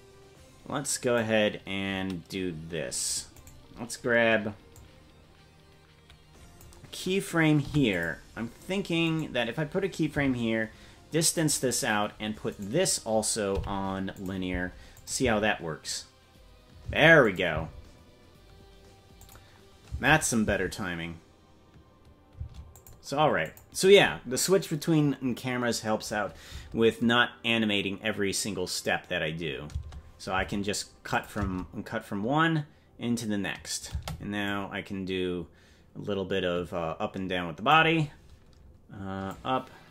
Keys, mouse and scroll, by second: 3.5 right click, 4.7-6.6 drag, 7.6 i, 9.0 right click, 10.1 g, 12.5 right click, 13.5 t, 14.9 click, 15.2 space, 17.2 click, 17.2 space, 17.5 space, 19.2 click, 19.9 space, 20.2 click, 20.4 space, 22.7 click, 22.7 space, 23.4 click, 26.4 space, 29.9 space, 31.1 click, 31.4 space, 34.4-37.7 drag, 34.4 space, 39.3 click.